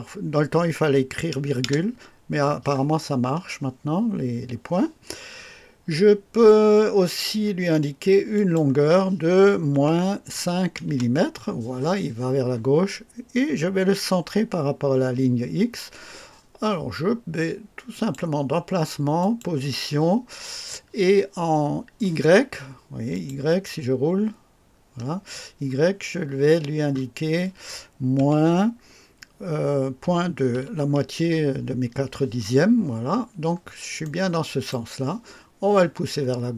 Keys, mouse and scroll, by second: 1.6 KP_Enter, 3.2-3.5 scroll up 1, 8.3 click, 9.7 KP_Subtract, 9.9 KP_Subtract, 10.3 KP_5, 10.8 KP_Enter, 17.9 click, 19.2 click, 23.1 click, 24.2 scroll down 1, 24.8 scroll up 1, 28.1 KP_Subtract, 30.0 KP_Decimal, 30.5 KP_2, 33.1-33.6 scroll down 1, 34.0-34.9 right drag.